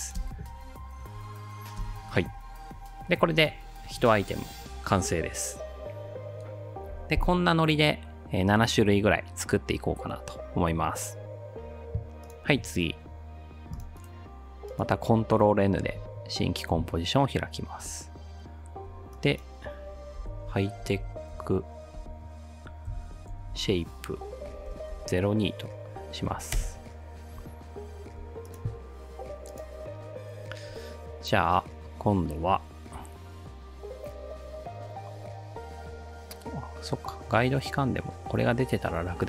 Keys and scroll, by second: 0.2 space, 1.8 space, 15.9 ctrl+n, 27.8 Return.